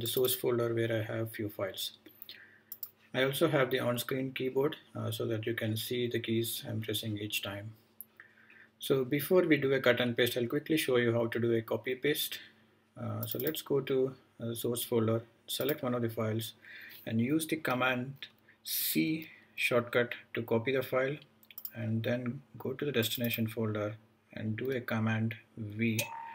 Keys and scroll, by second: 18.9 super+c, 25.7 super+v.